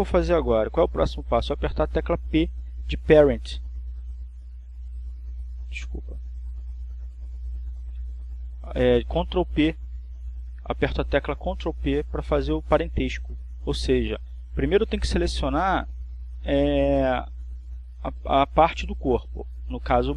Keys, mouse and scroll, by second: 1.9 shift+right click, 6.8 p, 9.9 Escape, 12.4 ctrl+p.